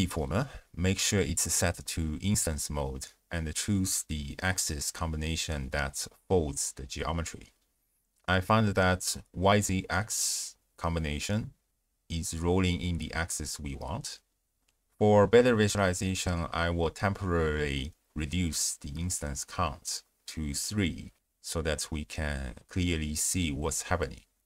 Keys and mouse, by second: 1.0 click, 6.9 click, 11.7-14.2 drag, 17.7 click, 18.8-20.4 drag.